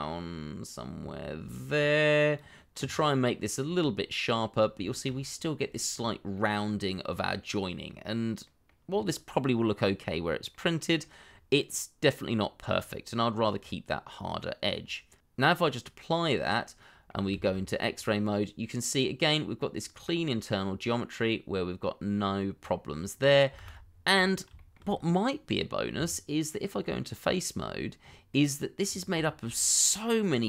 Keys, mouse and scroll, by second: 3.1-3.6 scroll down 1, 3.6-4.1 scroll up 1, 4.1 middle click, 4.5 scroll up 1, 4.8 shift+middle click, 5.1-5.7 shift+scroll up 1, 5.7 middle click, 6.9-7.7 scroll down 1, 8.4 middle click, 8.8-9.3 scroll down 1, 9.3 middle click, 10.1-10.5 scroll down 1, 10.5 middle click, 11.2-11.5 scroll up 1, 11.5 middle click, 12.6-13.3 scroll up 1, 13.3-13.6 scroll down 1, 13.6 middle click, 16.4-16.8 scroll down 1, 16.8 middle click, 17.3 shift+z, 17.7 scroll up 1, 18.0 middle click, 19.9-20.4 scroll up 1, 20.4 middle click, 22.8-23.2 scroll down 1, 23.2 middle click, 23.5 shift+z, 23.8 scroll down 1, 24.1 middle click, 24.5 shift+middle click, 24.8-25.3 scroll up 1, 25.3 middle click, 25.9 Tab, 28.0-28.3 scroll up 1, 28.3 middle click, 28.8 scroll up 1, 29.2 shift+middle click, 29.6-30.4 scroll up 1.